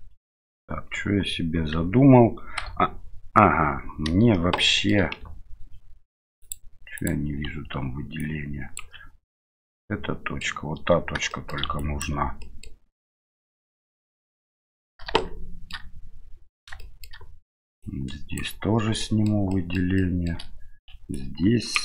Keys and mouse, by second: 0.2 shift+middle click, 1.7 shift+z, 2.6 KP_7, 4.5 shift+middle click, 8.2 ctrl+click, 9.4-10.4 middle drag, 11.3 shift+middle drag, 11.7 ctrl+drag, 12.4 ctrl+middle drag, 14.4 KP_7, 15.2-15.7 shift+middle drag, 16.8 shift+middle click, 17.8 ctrl+click, 19.0 shift+middle click, 19.5 shift+middle click, 19.9 shift+middle click, 21.2 ctrl+click.